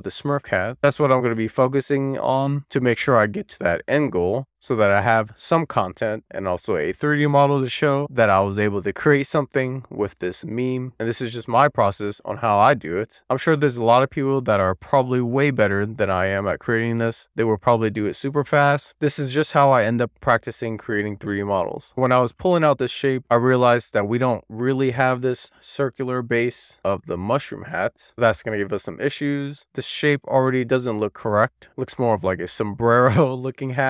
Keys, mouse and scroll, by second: 0.6 click, 0.9 ctrl+shift+click, 1.1 middle click, 1.5 click, 2.5 click, 4.1 middle click, 5.0 alt+middle click, 5.6 alt+middle click, 6.1 middle click, 6.6 click, 7.2 middle click, 7.6 click, 8.6 click, 9.5 ctrl+shift+click, 9.7 middle click, 10.0 click, 11.0 click, 11.4 ctrl+shift+click, 11.6 middle click, 12.0 click, 12.8 middle click, 13.1 click, 13.5 ctrl+shift+click, 13.7 middle click, 13.9 click, 14.5 middle click, 15.1 scroll down 2, 15.3 middle click, 15.8 middle click, 16.9 scroll down 1, 16.9 middle click, 21.8 middle click, 32.0 alt+middle click.